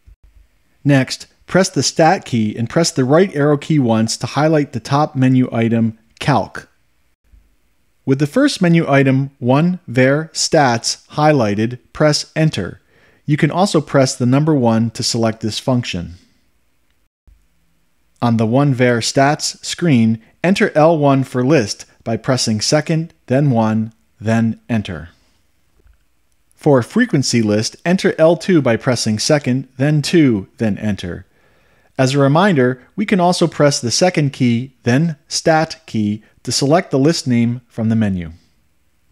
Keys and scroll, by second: 5.4 Right, 16.1 Return, 23.7 1, 25.1 Return, 30.5 2, 31.7 Return.